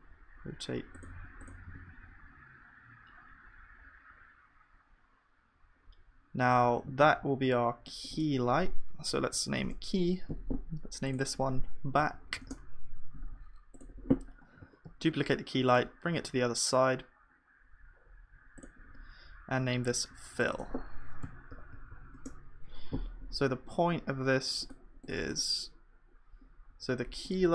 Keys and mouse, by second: 14.6-15.7 drag, 14.6 shift+d, 19.2-21.2 middle drag, 21.3-27.5 drag.